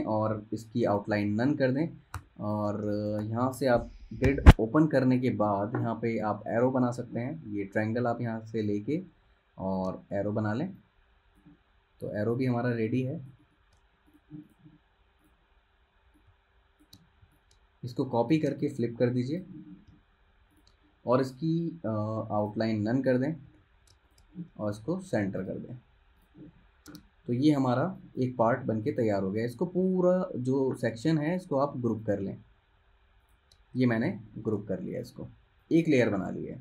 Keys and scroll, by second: 2.3-3.4 typing, 4.4 super+', 5.0 z, 5.8 v, 10.6 v, 23.6 super+g, 27.0 super+1, 28.0 space, 34.6 super+g, 36.3 super+z.